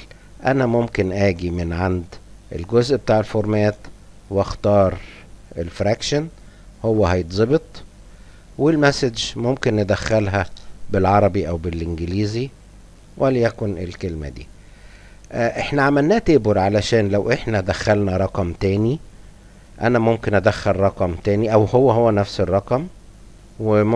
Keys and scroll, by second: 12.0 Tab, 12.2 Caps_Lock, 12.9 Return, 18.5-23.9 typing.